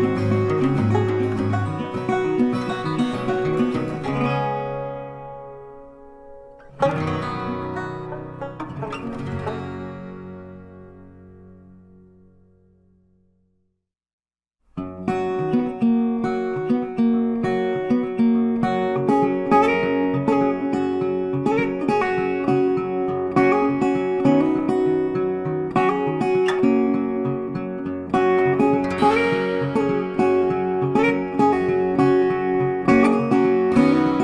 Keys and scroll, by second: 24.9 ctrl+t.